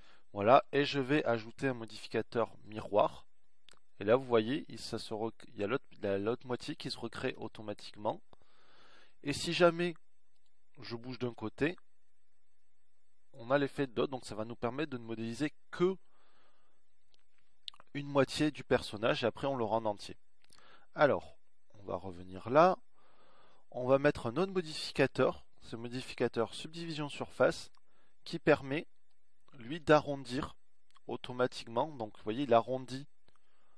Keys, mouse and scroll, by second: 7.1 z, 13.2-14.6 drag, 14.6 ctrl+z, 21.1 KP_1, 22.6 z, 29.7 z.